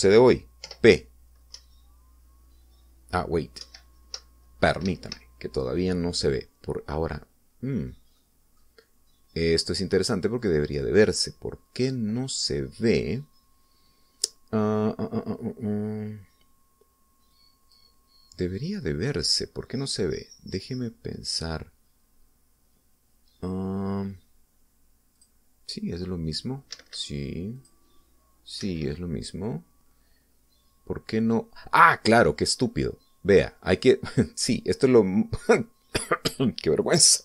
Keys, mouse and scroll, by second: 1.8 p, 2.7 Up, 4.8 Right, 6.0 Escape, 9.4 middle click, 11.6 click, 12.7-13.2 scroll down 1, 18.5 click, 25.2-25.5 scroll up 1, 26.4 click, 27.9 Escape, 28.8 click, 29.8 Escape.